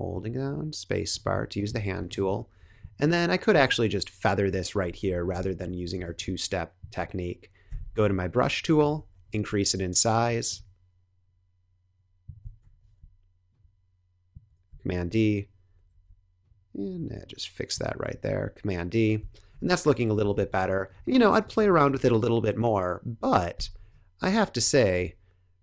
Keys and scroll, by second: 5.0 1, 5.2 Return, 6.0 space, 7.6 b, 8.6 ], 12.5 super+-, 14.6 super+d, 15.8 super+z, 18.0 super+d, 19.4 super+0, 20.3 Tab, 20.7 space, 21.9 super+-, 23.8 space, 24.9 Tab.